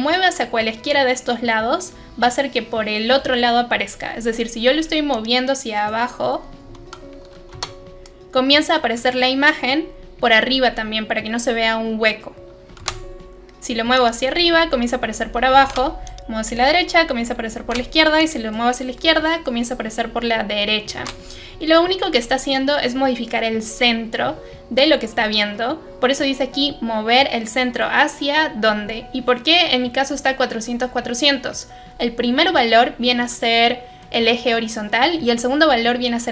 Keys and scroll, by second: 7.5 Caps_Lock, 12.7 ctrl+z, 15.6 ctrl+z, 17.6 ctrl+z, 20.9 ctrl+z.